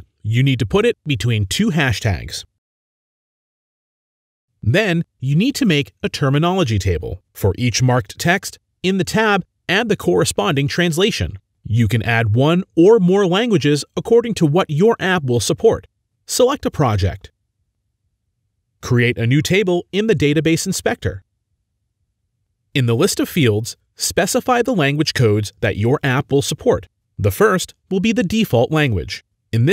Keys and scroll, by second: 0.8-1.6 typing, 2.8-3.5 typing, 15.8 typing, 22.3 ctrl+a, 22.4-23.9 typing.